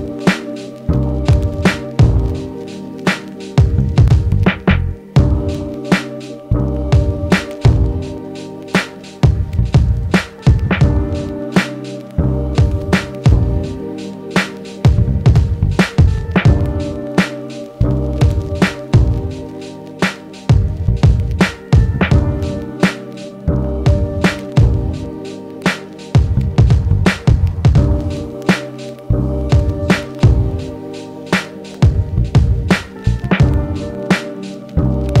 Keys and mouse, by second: 12.5 f, 13.7 shift+f, 15.7-18.0 drag, 17.1 shift+f, 18.2-19.7 drag, 19.0 f, 19.7 middle click, 19.8-32.6 drag, 32.7 ctrl+Tab.